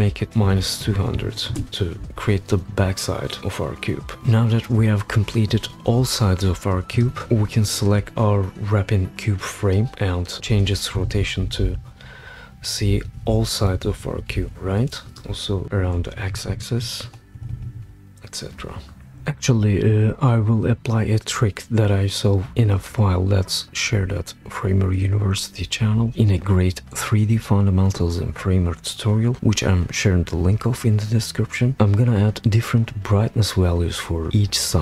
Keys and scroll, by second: 0.1-1.6 typing, 10.9 shift+Down, 11.1 shift+Down, 11.3 shift+Down, 13.8 Down, 14.3 shift+Down, 16.2 shift+Up, 16.3 shift+Up.